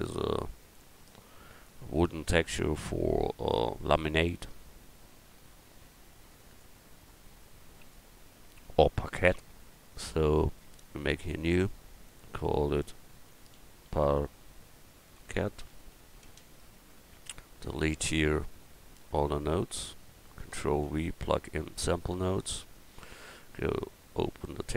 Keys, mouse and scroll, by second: 6.6-14.8 drag, 15.8 t, 19.7 x, 20.8 ctrl+v, 21.5-21.9 scroll down 1, 24.7 click.